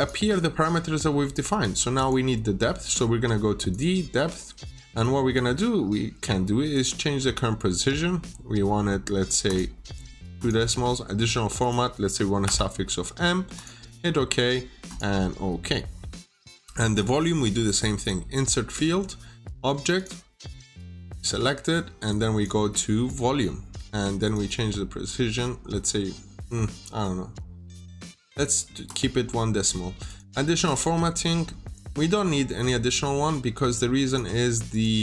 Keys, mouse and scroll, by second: 0.3 scroll up 1, 1.5 click, 12.3 m, 13.4 click, 16.8 right click, 17.9 click.